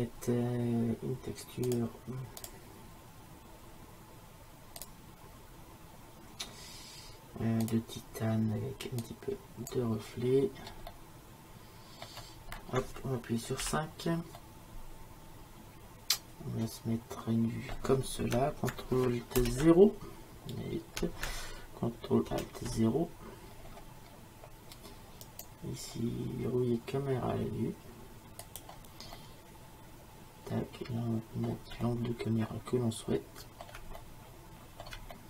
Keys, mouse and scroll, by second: 1.7-4.3 drag, 10.5-13.6 middle drag, 13.6 KP_5, 15.0 middle click, 16.8 middle click, 17.1-19.4 middle drag, 19.4 ctrl+alt+KP_0, 23.6-27.2 middle drag, 29.2-31.2 middle drag, 31.9-33.7 middle drag, 34.0 middle click.